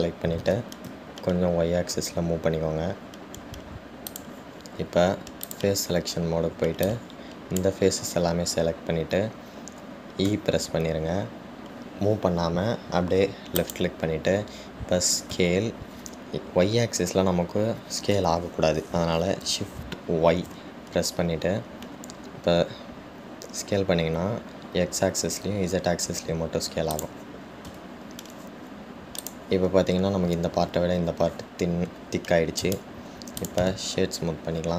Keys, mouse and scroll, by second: 6.7 click, 8.1 click, 30.4 click.